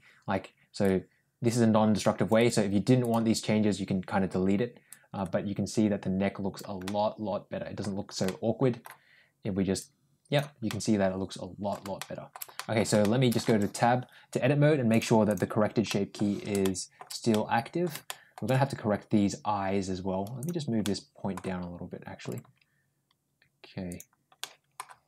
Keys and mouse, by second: 0.6-2.1 drag, 2.3 click, 4.8-6.5 drag, 6.7 middle click, 8.1-8.7 middle drag, 9.6 click, 10.5-11.6 middle drag, 11.8-12.2 shift+middle drag, 12.4 middle click, 12.9-13.2 shift+middle drag, 13.3 Tab, 14.8 click, 15.1 click, 15.7 middle click, 16.5 middle click, 17.1 middle click, 17.9 shift+middle click, 20.2 click, 20.6 middle click, 22.0 g, 24.2 middle click.